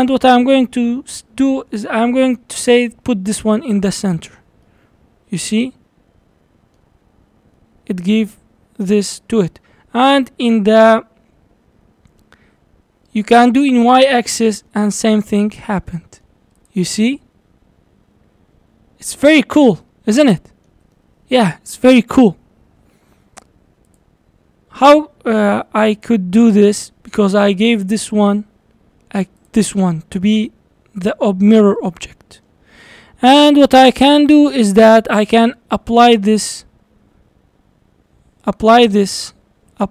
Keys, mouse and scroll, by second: 2.7 click, 4.6-7.2 middle drag, 7.2-7.6 scroll down 1, 7.6-10.7 middle drag, 13.7 click, 14.7-16.6 middle drag, 16.6 click, 16.9 scroll down 3, 17.2-23.9 middle drag, 23.9 click, 25.9 click, 26.8 click, 29.4 click, 31.8-33.5 middle drag, 33.5 scroll down 2, 33.7-34.5 middle drag, 34.5 click, 36.0 click, 39.7-39.9 drag.